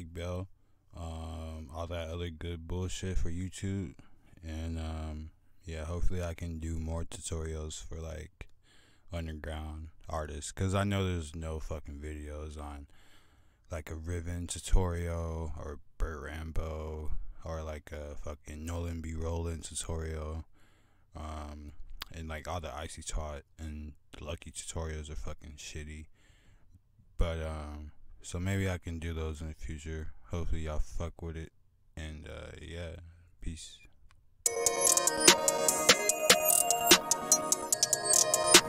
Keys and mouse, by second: 6.2 click, 7.1 F1, 7.1-8.3 drag, 12.5-21.8 drag, 29.2-29.9 drag.